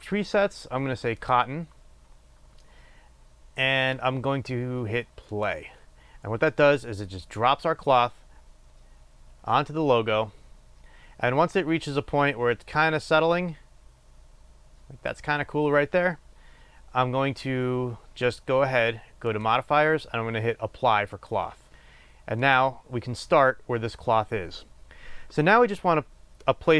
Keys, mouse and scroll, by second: 15.2-16.2 drag, 19.3-23.0 drag.